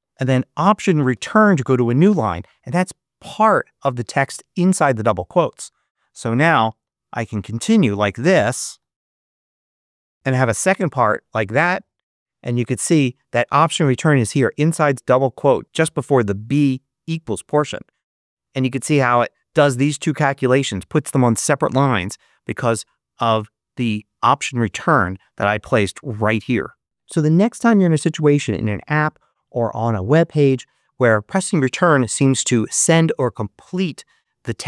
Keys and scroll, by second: 1.0 alt+Return, 6.2-9.1 typing, 10.1 BackSpace, 10.5 shift+0, 18.0 Return.